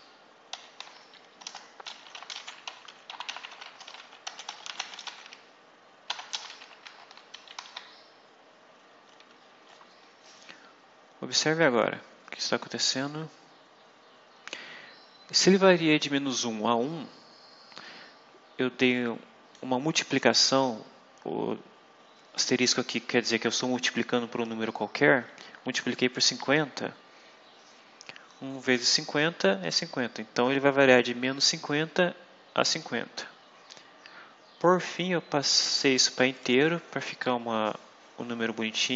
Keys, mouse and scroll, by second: 0.4 ;, 1.3 Return, 1.8-7.5 typing, 7.2 shift+Right, 18.7 click, 25.3 Right, 36.3 click.